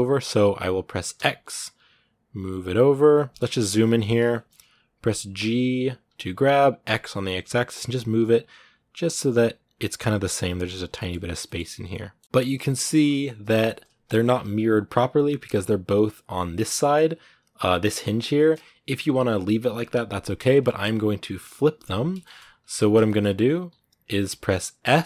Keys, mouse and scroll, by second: 3.3 shift+middle click, 3.5 scroll up 2, 4.1 shift+middle click, 4.3-5.2 scroll up 1, 5.2 g, 10.0 scroll down 2, 10.8-12.1 shift+middle drag, 12.1 scroll down 2, 12.2 shift+middle click, 12.8-14.1 scroll up 2, 14.1 scroll up 1, 14.2 KP_1, 15.3-16.6 scroll up 1, 16.6 shift+middle click, 17.1-17.9 scroll up 1, 17.9 scroll down 2, 18.1-22.3 shift+middle drag, 22.3-22.8 scroll up 1, 22.8 shift+middle click, 23.0-23.4 scroll down 2, 23.4-24.2 scroll up 1, 24.2-24.7 scroll up 1, 24.7 s.